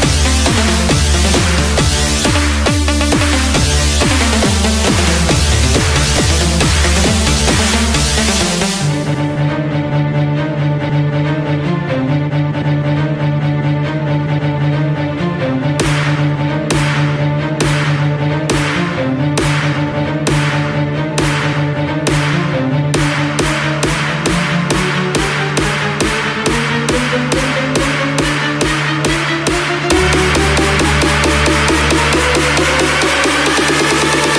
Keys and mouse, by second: 21.6 KP_3, 24.1 KP_Subtract, 32.8 KP_0.